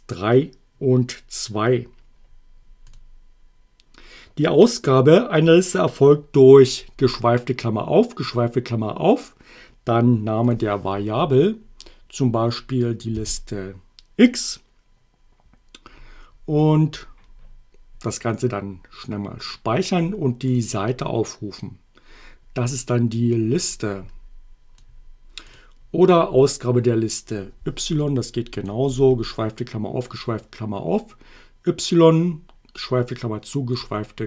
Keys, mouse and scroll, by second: 2.9 click, 10.5 click, 13.1 x, 16.9 click, 20.5 click, 23.3-24.9 drag, 25.5 click, 28.0 click, 28.9 y, 33.7 click.